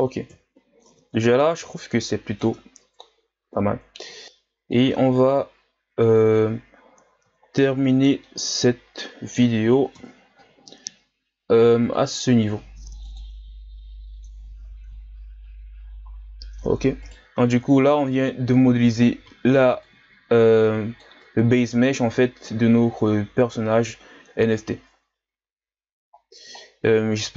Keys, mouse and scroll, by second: 0.3 KP_1, 0.9 Tab, 1.3-1.6 scroll up 1, 1.6 Tab, 2.0-2.4 scroll up 1, 2.4 Tab, 2.8 Tab, 4.2 click, 4.9 Tab, 5.2 a, 5.5-7.0 scroll down 6, 7.0-7.4 scroll down 2, 8.2-9.9 middle drag, 9.9 KP_1, 11.9-14.8 drag, 14.8-16.1 scroll up 3, 16.1-16.6 scroll down 1, 16.6-17.1 scroll up 1, 17.1 right click, 17.5 Tab, 19.0 a, 19.2 a, 19.8-21.2 drag, 21.2 Tab, 21.7 a, 22.0-22.8 scroll down 1, 22.8-24.2 scroll up 4, 24.2-25.2 scroll up 1, 25.2-26.1 scroll up 4, 26.1-27.3 scroll down 4.